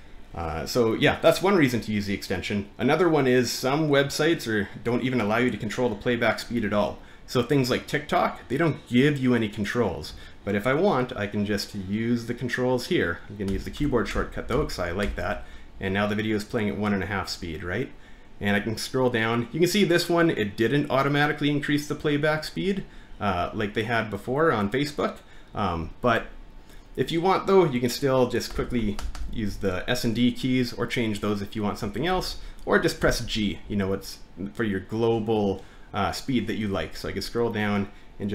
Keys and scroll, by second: 13.5-15.0 typing, 28.5-29.2 typing, 31.8-33.0 typing.